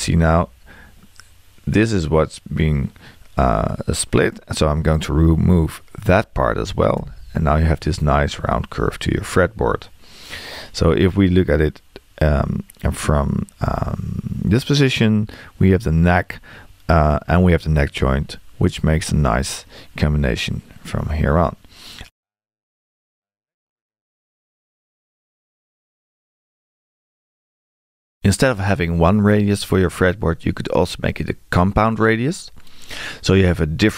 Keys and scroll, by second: 7.0 BackSpace.